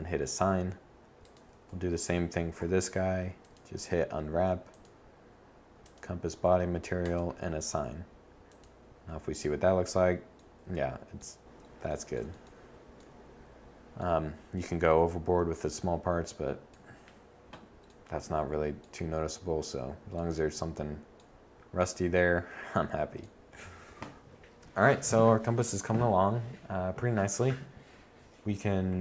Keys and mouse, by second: 16.1 middle click.